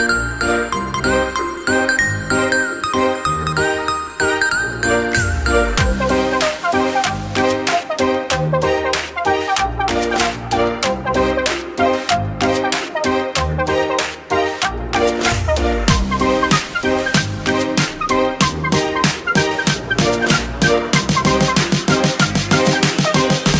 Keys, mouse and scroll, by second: 3.8-4.2 scroll down 1, 4.2-6.4 middle drag, 6.4 click, 10.2-12.8 drag, 12.8-13.4 scroll up 1, 13.4-15.6 middle drag, 15.6-18.8 drag, 20.3 click.